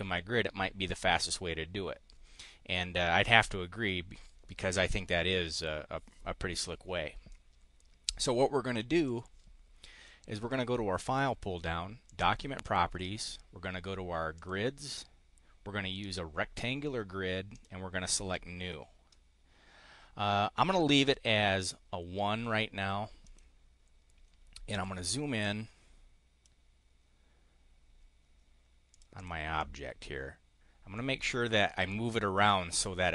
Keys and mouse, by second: 9.0 click, 12.0 click, 14.3 click, 17.5 click, 23.1 click, 24.6 click, 25.3-26.5 drag, 28.8 click, 29.2 click, 29.5-33.1 drag.